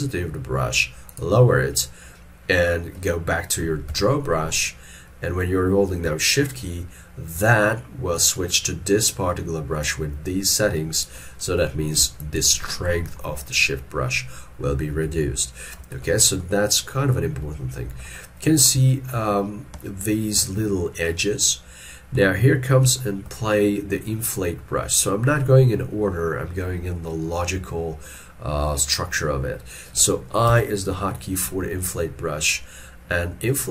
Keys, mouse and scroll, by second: 4.0 x, 9.9 shift+click, 11.5 middle click, 12.3 shift+click, 12.9 middle click, 13.6 scroll down 1, 15.2 ctrl+middle click, 16.1 shift+middle click, 18.3 middle click, 18.9 shift+middle click, 19.9 ctrl+middle click, 22.2 middle click, 23.0 shift+middle click, 28.2 middle click.